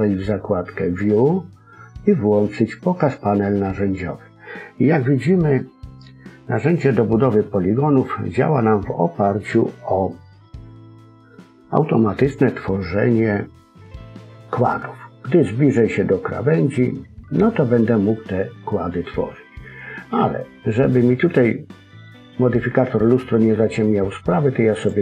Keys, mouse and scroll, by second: 0.8 click, 15.9 middle click, 24.7 click.